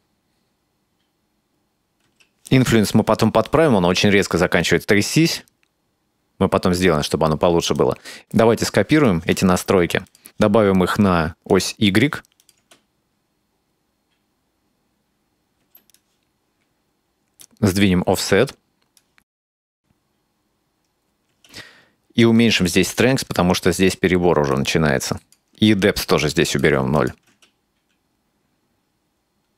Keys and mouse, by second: 2.1 space, 3.5-5.2 drag, 5.3 space, 6.4-7.8 drag, 6.4 space, 9.0 click, 10.1 click, 11.6 click, 12.4 click, 12.6 space, 15.9 click, 17.5-19.1 drag, 19.4 click, 19.5 space, 21.3 space, 24.6 shift+click, 26.2 click, 27.0 click, 27.3 space.